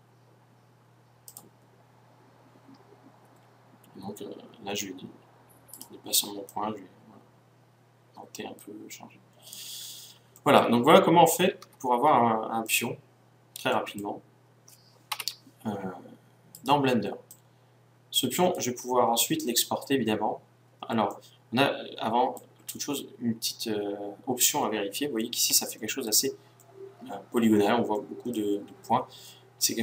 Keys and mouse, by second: 1.4-3.3 drag, 3.4-5.8 middle drag, 5.8-7.6 right drag, 6.5-8.5 drag, 11.4-14.9 drag, 11.6 z, 15.2 KP_1, 16.6 click, 17.9-19.2 drag, 21.2-26.8 middle drag, 27.2 middle click.